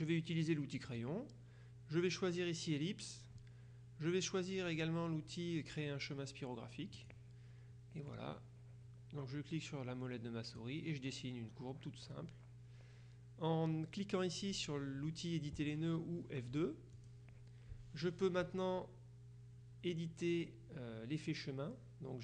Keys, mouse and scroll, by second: 0.9 click, 7.0 click, 8.1-11.1 drag, 17.1 click.